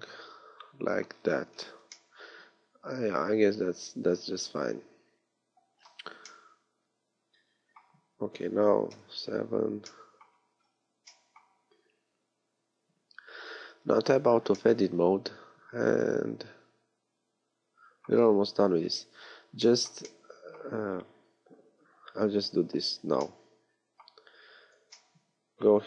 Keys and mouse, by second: 8.1 middle click, 8.9 KP_7, 14.0 Tab, 18.8-20.1 middle drag, 22.4 KP_3.